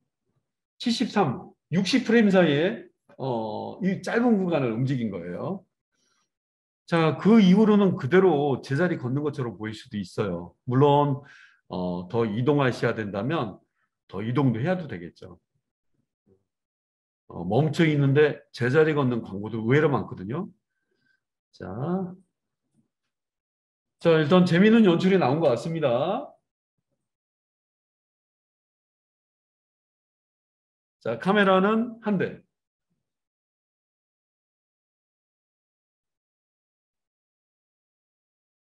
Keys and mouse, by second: 25.3 space, 31.5-38.6 middle drag.